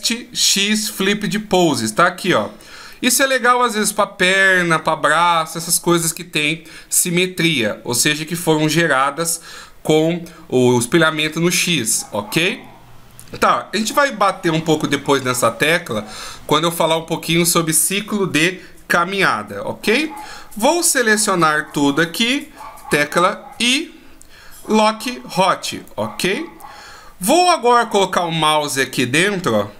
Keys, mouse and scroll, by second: 2.5 middle click, 19.4-20.8 scroll down 2, 20.8 a, 23.1 i.